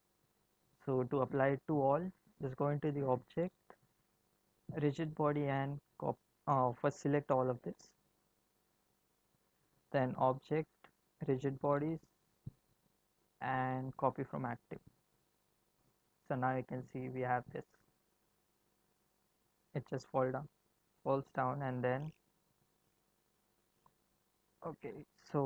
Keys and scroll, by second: 16.2 space, 18.9 space.